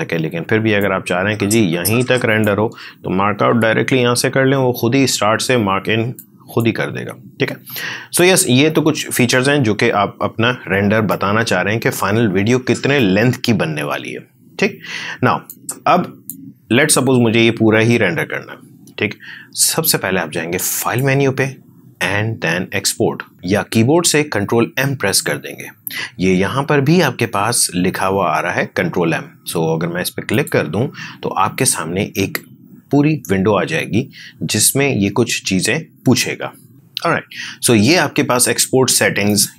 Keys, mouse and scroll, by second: 0.7-3.4 drag, 3.4 shift+o, 6.1 shift+click, 8.5 ctrl+shift+z, 11.0 shift+click, 15.4-20.7 shift+drag, 30.2 shift+click, 39.2-39.5 shift+drag.